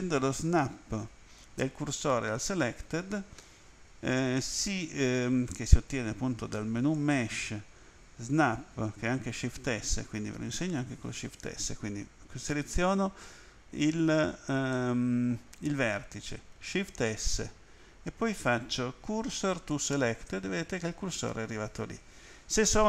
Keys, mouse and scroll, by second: 6.9 click, 10.6 right click, 14.0 right click, 14.7 middle click, 16.9 shift+s, 19.7 click.